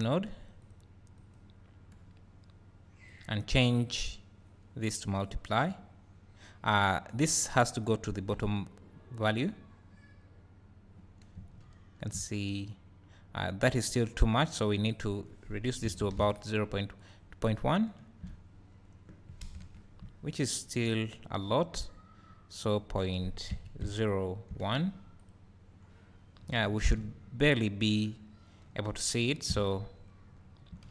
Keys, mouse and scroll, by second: 1.3 click, 3.1 click, 4.3-14.5 drag, 11.2 scroll up 1, 12.2 `, 12.7 scroll down 1, 17.0 click, 18.5-19.6 scroll down 3, 19.6 KP_0, 20.9 scroll down 1, 25.2 click, 26.0-26.4 scroll up 2, 28.8 `, 29.7-30.3 scroll up 2, 30.3 scroll down 1.